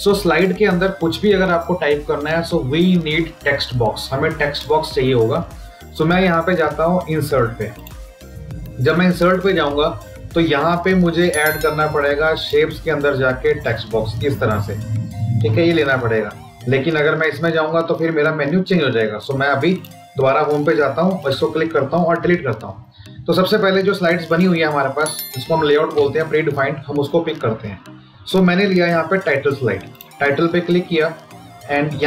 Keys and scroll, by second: 22.1 Delete.